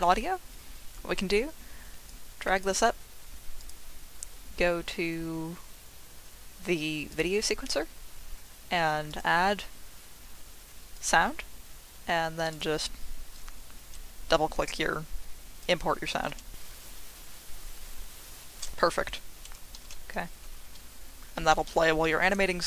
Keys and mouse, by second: 2.1-3.6 drag, 3.7-7.7 drag.